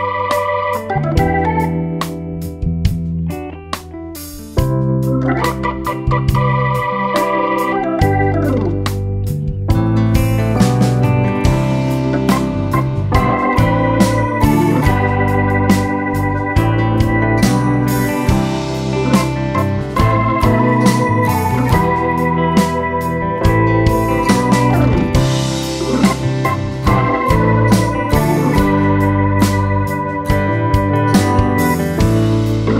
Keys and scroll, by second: 1.9 alt+super+z, 2.6 space, 16.2 space, 25.7 space.